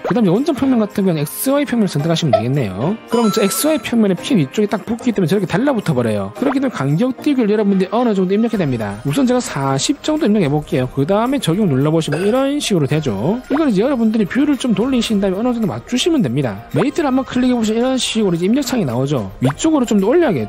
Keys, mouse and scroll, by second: 2.5 click, 8.6 click, 9.9 4, 11.7 click, 12.4 click, 12.9 middle click, 14.9 click, 15.5-15.9 scroll up 4, 17.9 click.